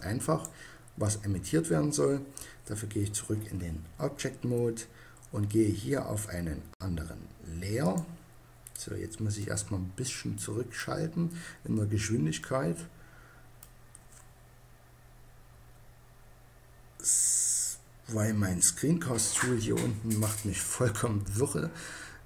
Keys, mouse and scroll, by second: 0.3 click, 11.6-14.9 middle drag, 14.9 KP_1.